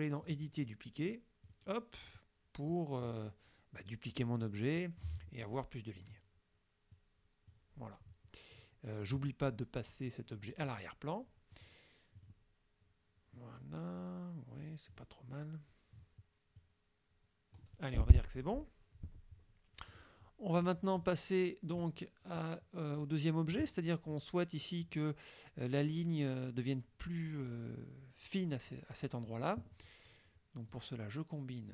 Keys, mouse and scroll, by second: 0.3 click, 1.5 click, 2.8 click, 4.2-5.2 drag, 7.0 click, 10.6 click, 11.6 click, 12.3 click, 13.5-15.1 drag, 16.6-17.8 drag, 20.0 click, 21.1 click, 22.4-23.8 drag, 30.8 click.